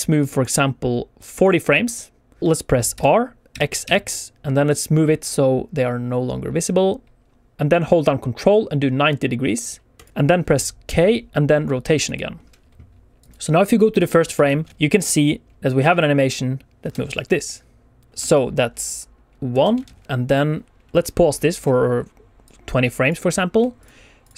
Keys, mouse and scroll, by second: 0.1 click, 2.9 r, 3.4 x, 3.7 x, 9.9 ctrl+click, 10.8 k, 13.1 click, 13.9 alt+a, 14.4 alt+shift+z, 15.0 space, 16.7 space, 18.1 click, 18.1 alt+shift+z, 18.1 space, 19.4 space, 19.8 alt+shift+z, 20.0 alt+shift+z, 20.0 alt+a, 20.0 click, 20.9 click, 22.3 click, 23.7 shift+click, 24.1 click.